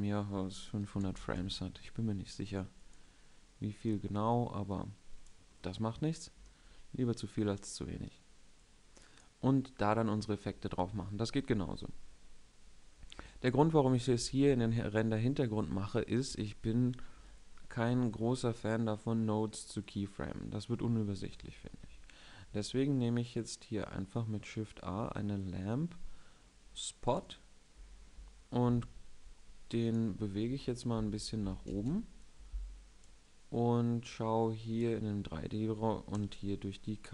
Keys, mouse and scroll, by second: 6.6-8.3 middle drag, 16.0 KP_1, 21.3 shift+a, 30.6 ., 31.4 ctrl+space, 32.3 click, 35.8 KP_0.